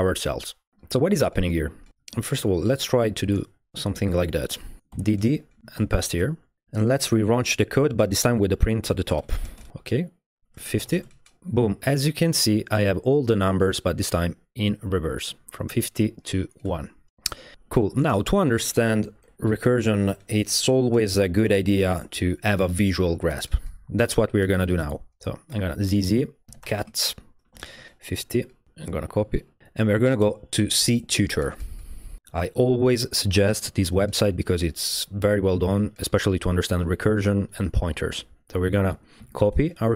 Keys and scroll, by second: 4.9 d, 5.1 d, 5.6 Up, 5.8 Up, 5.8 shift+p, 6.6 shift+z, 8.4 ctrl+l, 9.2 typing, 9.3 Tab, 9.6 Return, 10.6-11.4 typing, 17.8 v, 18.0 Tab, 18.1 Return, 25.5-27.5 typing, 27.8 Tab, 27.9 Return, 29.4-30.1 typing, 30.2 Return, 39.2 super+a, 39.4 BackSpace.